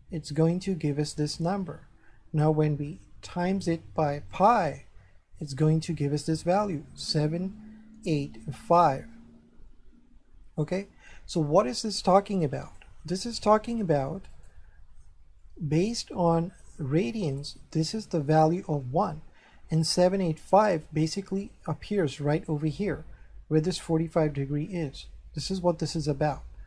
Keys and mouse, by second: 0.3 click, 3.3 click, 5.5 click, 12.6 click, 14.3 right click, 15.4 shift+middle click.